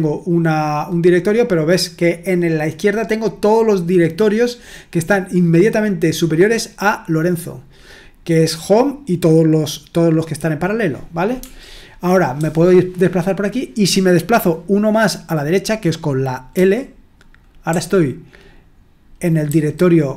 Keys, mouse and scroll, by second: 11.4-12.3 typing, 16.5 typing, 17.7 typing, 19.4 typing.